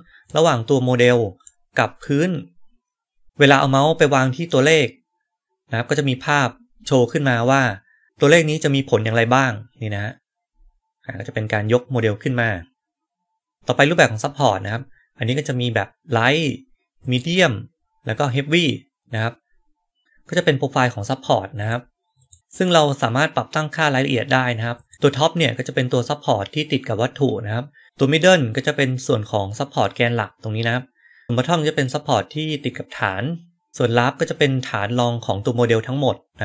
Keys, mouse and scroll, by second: 0.1-1.3 right drag, 1.9-3.2 right drag, 16.9 click, 18.4 click, 21.5 click, 22.1 click, 24.7 click.